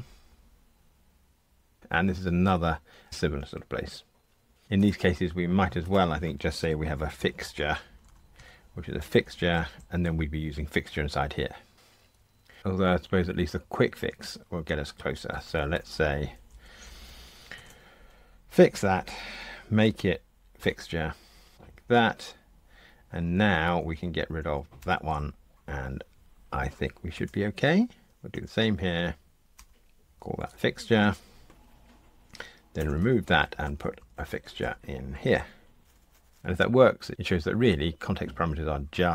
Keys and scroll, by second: 8.4 Tab, 12.4 super+z, 13.6 super+z, 17.6 F1, 20.6 super+v, 24.8 super+BackSpace, 27.1 F2, 28.3 alt+Return, 30.3 super+v, 32.7 super+BackSpace.